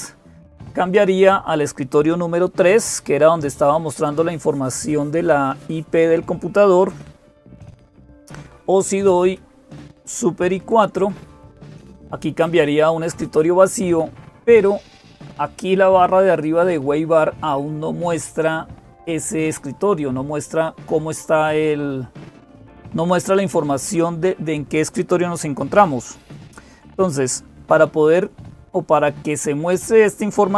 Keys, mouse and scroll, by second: 0.0-30.5 typing.